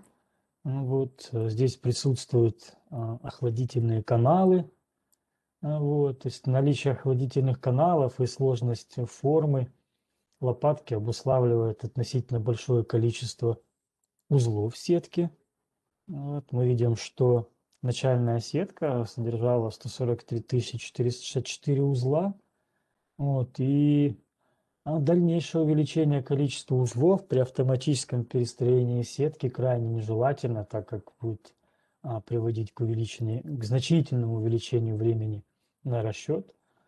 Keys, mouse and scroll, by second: 0.0 middle click, 1.8 click, 3.3 middle click, 3.8 scroll, 4.4 scroll, 5.5 click, 6.4 scroll, 7.1 scroll, 7.5 scroll up 5, 7.6 scroll, 8.4 scroll up 4, 9.4 scroll, 14.3 click, 17.8 click, 19.3 click, 33.9 right click.